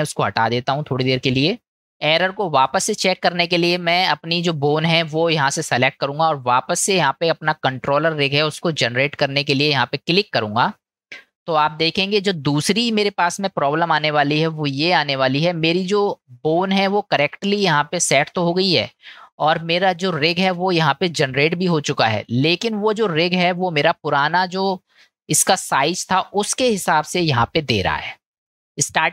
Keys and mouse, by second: 0.1 click, 1.0-1.7 middle drag, 1.8 middle click, 2.9 click, 13.8-14.7 middle drag, 15.5-16.3 middle drag, 28.8 click.